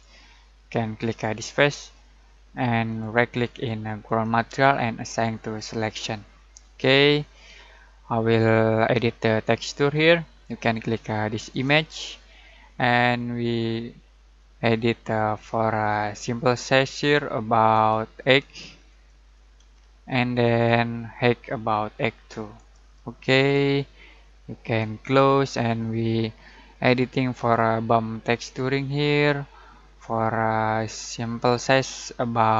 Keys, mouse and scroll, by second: 4.0 right click, 5.5 click, 11.5 click, 14.3-15.6 drag, 19.5 8, 20.4 click, 21.7 8, 22.5 click, 25.0-27.7 drag, 31.7-32.5 drag.